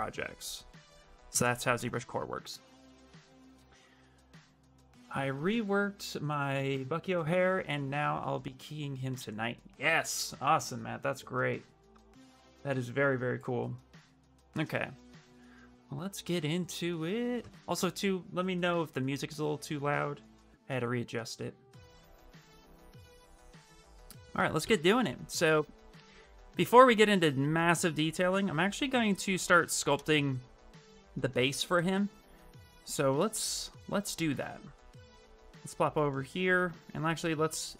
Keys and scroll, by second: 1.2 Return, 1.7 Return.